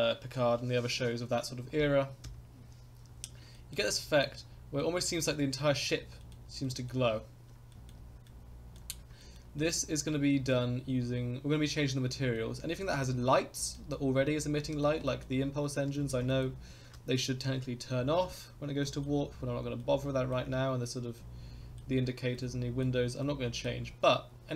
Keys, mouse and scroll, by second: 2.2 KP_0, 3.1 scroll up 3, 3.5 shift+middle drag, 3.9 middle click, 4.5 scroll up 2, 4.8 shift+middle click, 5.1 scroll, 5.6 middle click, 5.9 scroll, 6.2 shift+middle click, 6.6 middle click, 6.9 scroll, 7.4 scroll up 2, 7.7 shift+middle click, 8.2 middle click, 9.2 shift+middle drag, 9.6-10.0 middle drag, 10.3 shift+middle drag, 10.8 scroll up 3, 11.6 scroll down 2, 12.0 scroll up 2, 12.3-12.7 middle drag, 12.9 scroll down 2, 13.5 middle click, 13.9 scroll up 1, 14.2-14.8 shift+middle drag, 15.0 middle click, 15.9-16.4 shift+middle drag, 18.0 scroll down 2, 18.8 middle click, 19.3 scroll up 3, 19.8-20.3 middle drag, 21.2-21.8 middle drag, 22.3-22.8 middle drag, 23.2-23.7 middle drag.